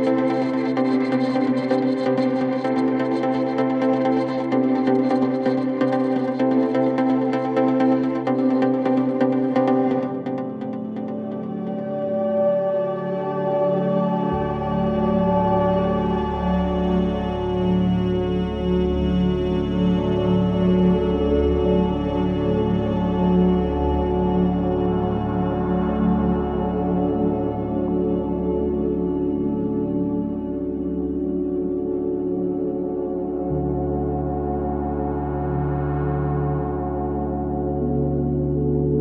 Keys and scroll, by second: 2.6 3, 7.9 ], 12.8 ], 14.6 4, 17.1 4, 17.7 2, 18.7 ], 24.8 ], 26.5 ], 28.8 5, 32.6 3, 36.3 ].